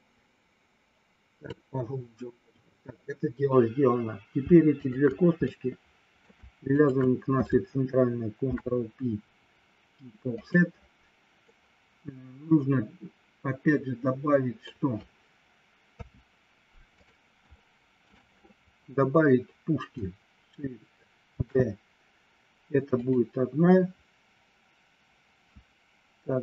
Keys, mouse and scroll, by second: 4.8 shift+click, 5.4 middle click, 6.7 shift+click, 8.4 ctrl+p, 11.4-14.0 middle drag, 14.2 middle click, 15.9 KP_3, 16.8 click, 17.6 middle click, 21.3 shift+d, 22.9 click.